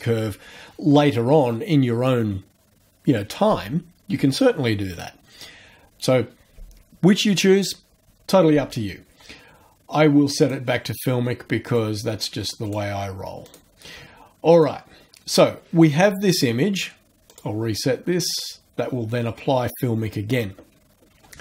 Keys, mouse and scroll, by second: 10.4 click, 11.7 click, 12.7 click, 13.5 click, 14.6 click, 17.3 click, 18.3 click.